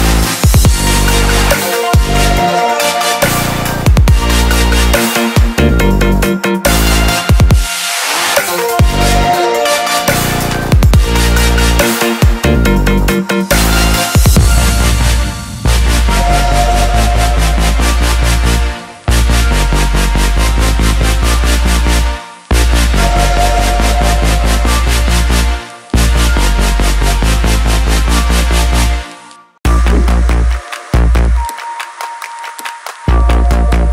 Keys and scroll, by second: 8.6-13.0 typing, 23.7 ctrl+0.